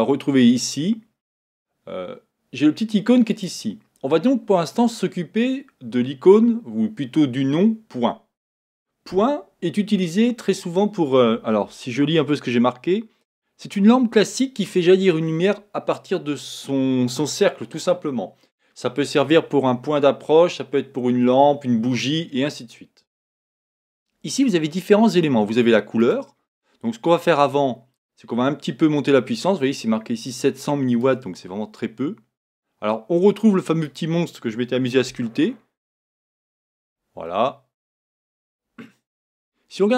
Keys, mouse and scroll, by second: 0.0 click, 3.6 click, 26.3 click, 28.0 click, 31.0-34.0 drag, 35.3 shift+middle click, 36.2-37.3 scroll up 4, 37.3 shift+middle click, 38.0-39.9 scroll down 2.